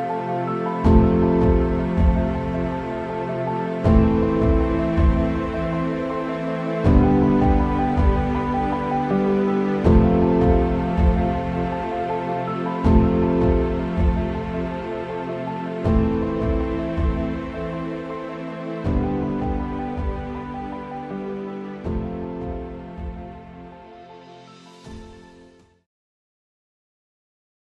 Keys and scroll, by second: 9.6 space.